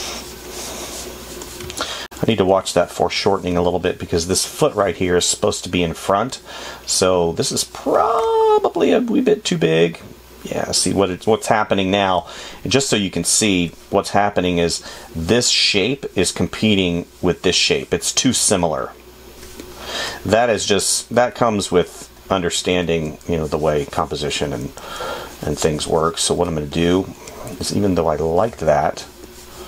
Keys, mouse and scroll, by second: 2.0 space.